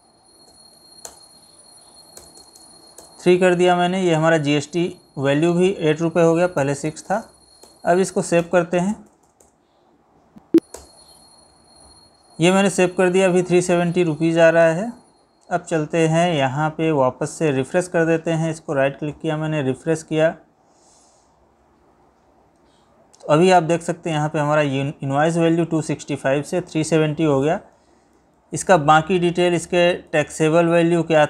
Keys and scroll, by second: 27.5 Right, 30.3 Left, 30.7 Right.